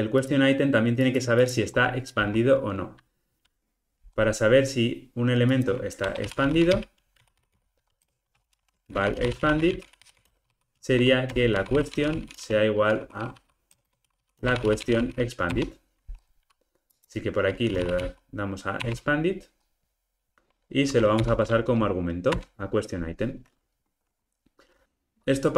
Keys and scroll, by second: 15.5 Return, 21.2 alt+Return.